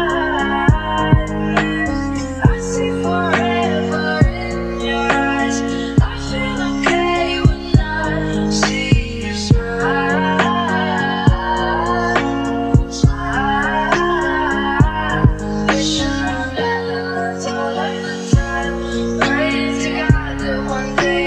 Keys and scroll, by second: 11.5 ctrl+a.